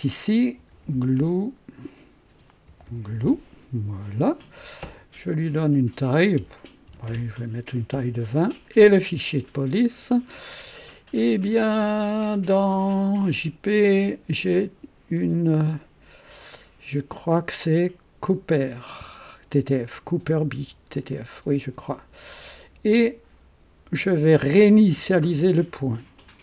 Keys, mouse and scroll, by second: 0.3-3.7 typing, 5.6 click, 6.9 KP_2, 7.1 KP_0, 8.1 typing, 9.4 click, 13.3 click, 20.9 click.